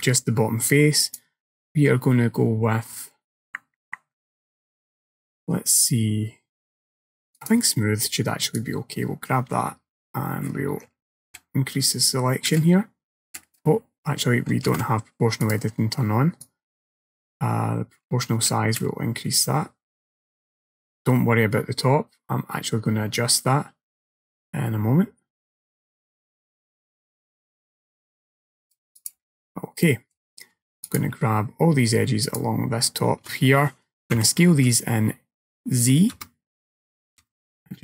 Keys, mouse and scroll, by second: 1.1 click, 8.6 click, 14.7 ctrl+z, 15.5 click, 16.5 click, 29.0 click, 29.9 middle click, 30.9 alt+click, 32.3 alt+shift+click, 34.2 s.